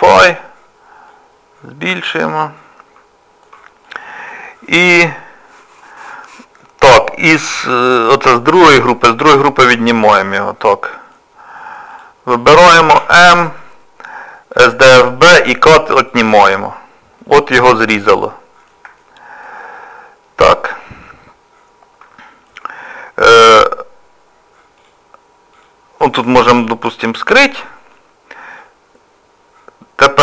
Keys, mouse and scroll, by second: 1.1 click, 2.7 middle click, 3.9 click, 9.3 scroll up 1, 9.4-9.7 scroll down 2, 9.9 shift+middle click, 10.4-10.8 scroll up 1, 10.8 middle click, 11.9 click, 12.9 m, 17.2 middle click, 17.2 scroll down 1, 19.0 shift+middle click, 19.5 scroll down 1, 21.1 middle click, 24.8 click, 25.6 click, 27.4 h, 28.0 middle click.